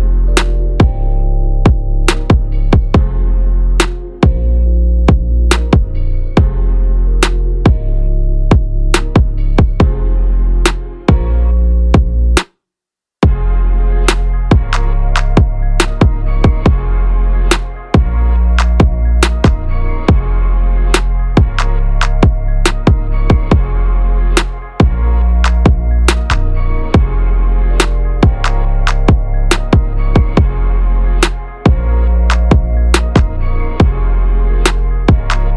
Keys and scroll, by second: 16.3 BackSpace, 16.7 BackSpace, 18.0 ctrl+z.